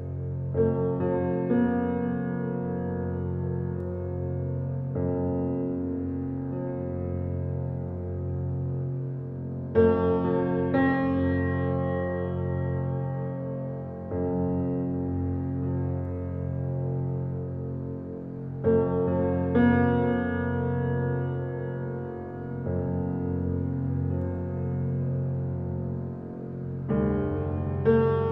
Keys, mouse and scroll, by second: 0.2 scroll up 1, 0.8 shift+click, 1.1 shift+click, 1.6 shift+click, 2.9 ctrl+click, 3.8 s, 5.9 shift+click, 6.6 shift+d, 10.4 click, 10.7 scroll down 2, 11.1-11.6 middle drag, 11.6 scroll up 1, 12.0-14.0 shift+middle drag, 14.0-14.8 scroll down 2, 14.8 shift+a, 19.2 s, 21.0-22.1 shift+middle drag, 22.1 s, 24.4 scroll up 1, 24.4-26.5 middle drag, 26.5 g.